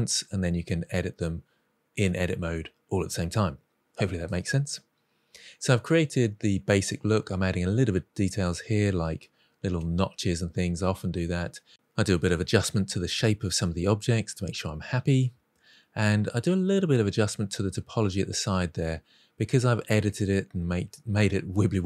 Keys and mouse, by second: 0.1 click, 0.7 middle drag, 0.9-2.7 typing, 1.3 middle click, 1.5 middle click, 1.8 Tab, 1.8 click, 2.1 click, 2.6 click, 2.8 click, 2.9-3.5 middle drag, 3.6 middle click, 3.8 middle drag, 4.1 Tab, 4.2 Tab, 4.2 middle click, 4.4-4.7 middle drag, 4.8 g, 4.8 click, 5.0 g, 5.3 click, 5.4 g, 5.6 middle click, 5.7 click, 5.8 middle click, 6.0 ctrl+shift+b, 6.7 middle click, 6.8 middle click, 7.0 shift+middle drag, 7.3 shift+click, 7.6-8.6 typing, 7.9 click, 8.1 middle click, 8.3 click, 8.9 Tab, 8.9-10.1 middle drag, 10.2 click, 10.2 Tab, 10.3 shift+middle click, 10.6 2, 10.7 click, 11.2 g, 11.3 c, 11.6 click, 11.7 middle click, 11.8 Tab, 11.9 middle click, 12.1 Tab, 12.1 middle click, 12.6 KP_3, 12.8 alt+z, 13.0 shift+middle drag, 13.1 click, 13.5 shift+click, 13.7 g, 14.7-15.0 drag, 14.9 1, 15.0 g, 15.2 click, 15.3 Tab, 15.3 middle click, 15.5 middle drag, 15.8 alt+z, 15.9 middle click, 16.0 Tab, 16.0 ctrl+t, 16.2 ctrl+r, 16.4 middle click, 16.5 click, 16.6-17.8 typing, 16.6 click, 16.9 click, 17.2 click, 17.4 middle click, 17.5 click, 18.0 middle click, 18.1 Tab, 18.2-18.7 middle drag, 18.9 Tab, 19.1 click, 19.5 shift+click, 19.7 g, 19.8 z, 20.0 Tab, 20.1 middle drag, 20.6 middle click, 21.0 middle click, 21.2 middle drag, 21.3 Tab, 21.4 click, 21.4-21.8 typing.